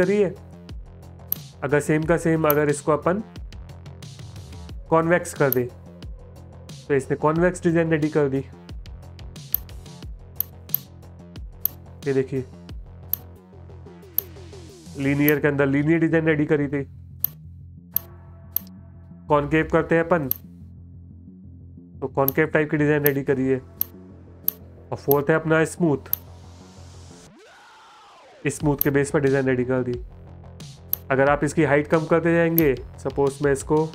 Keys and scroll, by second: 7.1 space, 8.0 space, 16.5 space, 20.9 space, 21.4 space, 28.1 space, 29.3 space, 32.6-33.9 typing.